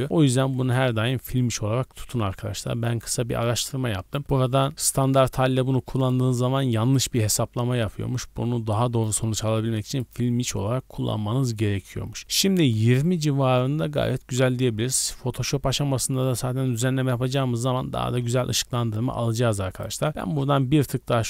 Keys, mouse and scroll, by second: 4.2-5.0 drag, 5.9-10.0 drag, 10.8-11.2 scroll up 2, 15.1 click, 19.7-21.2 drag.